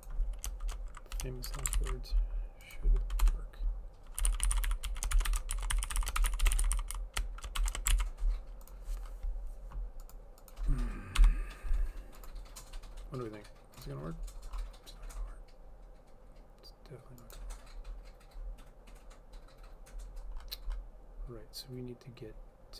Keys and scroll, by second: 1.6 shift+0, 1.9 ctrl+s, 3.3 Return, 4.1-7.7 typing, 8.0 ctrl+s, 11.3 BackSpace.